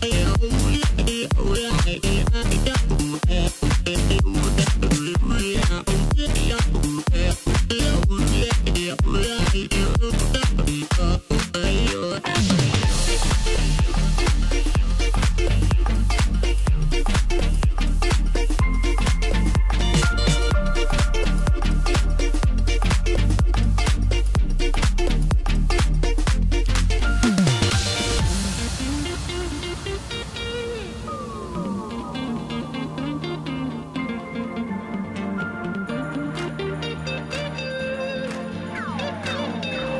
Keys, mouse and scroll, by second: 1.3 KP_3, 2.3-3.7 scroll up 3, 3.7 g, 7.5 g, 12.4 g, 16.2 scroll up 2, 16.4-16.8 scroll down 1, 16.8-18.1 middle drag, 18.1-18.4 scroll up 1, 18.8 s, 20.5-21.0 scroll up 1, 21.0-21.6 scroll up 3, 21.7-22.1 scroll down 2, 22.1-25.0 middle drag, 25.3 Tab, 27.0 ctrl+r, 33.7 ctrl+r, 39.0 click, 39.7 scroll up 1.